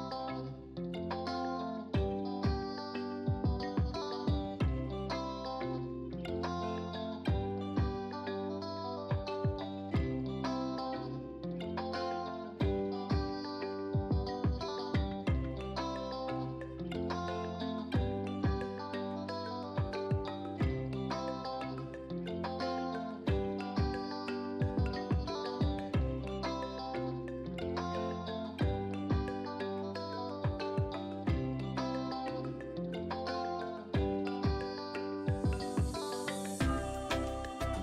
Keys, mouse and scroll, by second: 5.3-6.1 typing, 9.6 click, 10.8 0, 11.1 Return, 13.1 click, 17.8 click, 21.5-27.5 alt+drag, 27.5 ctrl+t, 28.4-37.8 drag.